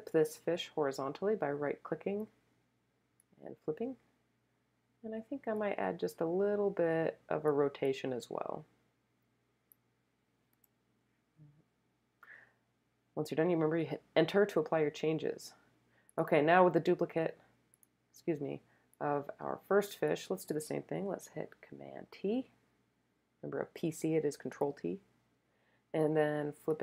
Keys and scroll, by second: 10.5 Return, 22.0 super+t.